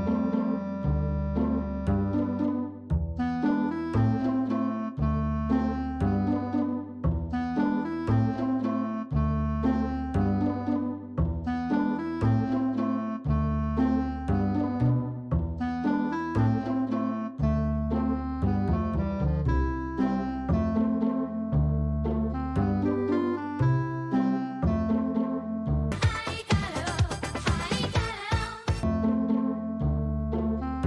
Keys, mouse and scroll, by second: 0.0-2.0 middle drag, 2.0 click, 4.9 Tab, 6.7 click, 7.3 ctrl+click, 15.2-17.5 middle drag, 18.3 ctrl+middle click, 18.8-19.3 middle drag, 19.5 shift+middle click, 19.9 middle click.